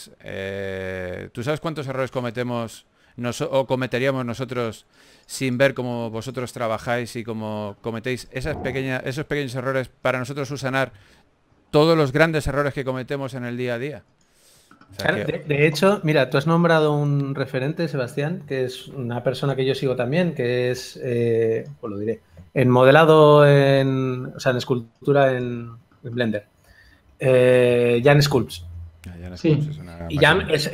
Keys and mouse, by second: 0.5 f, 3.9 click, 5.3 f, 8.1-12.6 drag, 14.4 click, 16.3 a, 16.9 ctrl+s, 19.1 a, 20.1 shift+d, 20.7 alt+g, 21.3 KP_3, 21.9 g, 23.4 KP_1, 24.2 g, 25.0 s, 25.8 g, 28.7 g, 29.5 KP_3.